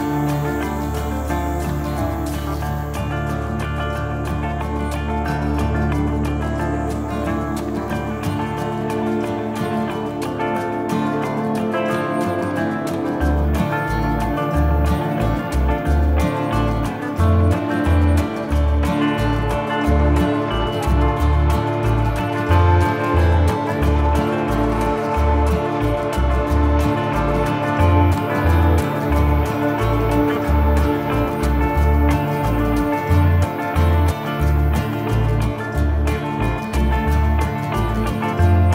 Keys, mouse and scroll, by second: 0.7 click, 2.4 middle click, 3.5 click, 5.0 click, 6.0 click, 6.1 middle click, 6.4 click, 8.0 click, 10.4 click, 14.0 KP_0, 14.8 KP_1, 14.9 KP_5, 15.0 Return, 15.5 scroll up 1, 16.0 ctrl+middle click, 16.2 middle click, 20.2 scroll up 1, 20.6 ctrl+middle click, 21.5 click, 25.2 middle click, 25.8 click, 27.4 click, 29.0 middle click, 30.0 middle click, 31.3 click, 34.3 KP_0, 34.7 Return, 35.2 middle click, 36.2 ctrl+s, 37.2 click.